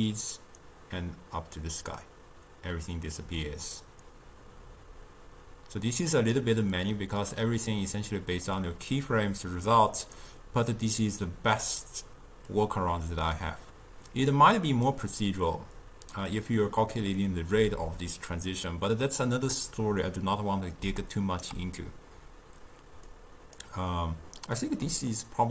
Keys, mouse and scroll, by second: 7.0-10.3 middle drag, 11.1-12.6 middle drag, 12.6-15.6 drag, 15.9-19.2 drag, 21.1 right click, 21.6 d, 23.2-24.7 drag, 24.7-25.5 middle drag.